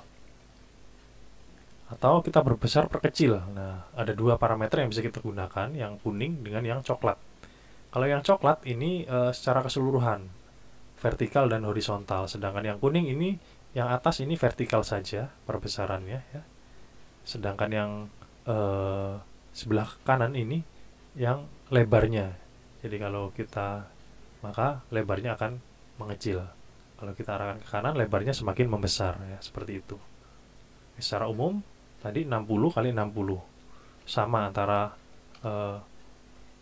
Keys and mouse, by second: 0.2 KP_0, 0.5 KP_Enter, 14.2 click, 15.8 click, 23.0 click, 26.2 click, 27.4 click, 31.9 click, 33.6 KP_6, 33.9 KP_0, 34.3 KP_Enter, 34.7 KP_6, 35.0 KP_0, 35.4 KP_Enter.